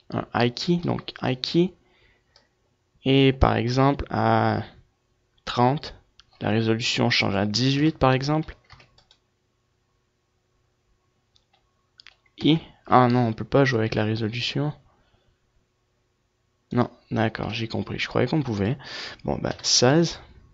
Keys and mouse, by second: 0.3 i, 2.3 i, 4.5-6.1 drag, 8.2-11.4 drag, 13.1 i, 15.5 click, 18.7-20.5 drag.